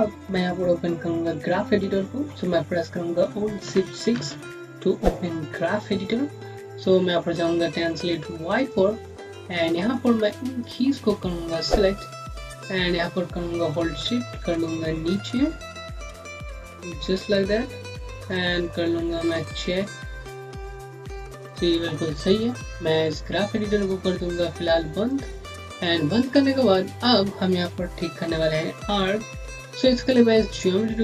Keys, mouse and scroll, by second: 4.0 alt+shift+6, 8.4 click, 9.1 scroll down 1, 9.8 click, 10.8 scroll up 1, 13.9 scroll up 1, 14.1 middle click, 17.6 scroll down 1, 18.1 middle click, 18.4 scroll down 1, 18.6-19.1 scroll up 1, 19.1 click, 24.8 click, 26.1 scroll down 1.